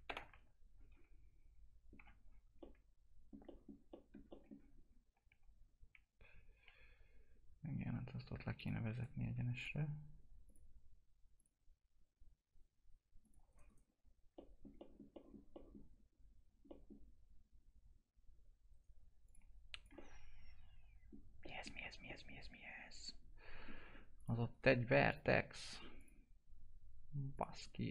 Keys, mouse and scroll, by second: 0.0 ctrl+BackSpace, 0.7 scroll down 1, 1.9 F4, 2.1 scroll down 1, 2.5 alt+middle click, 4.7 scroll up 1, 5.2 F4, 6.4 scroll down 1, 6.6 F4, 8.5 click, 8.9 right click, 9.5 click, 13.4 right click, 14.2 right click, 14.3 alt+middle click, 16.2-16.6 scroll up 1, 16.6 middle click, 19.2 click, 20.0-24.1 alt+middle drag, 24.1 click, 24.5 right click, 25.0 click, 27.5 right click.